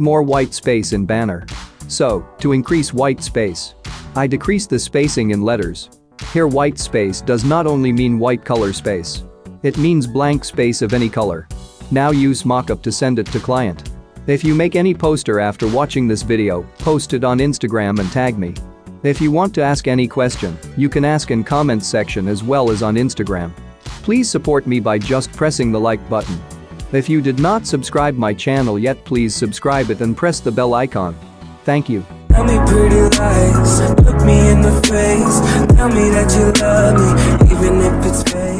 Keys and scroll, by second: 14.8 typing, 15.1 Return, 30.1 ctrl+0.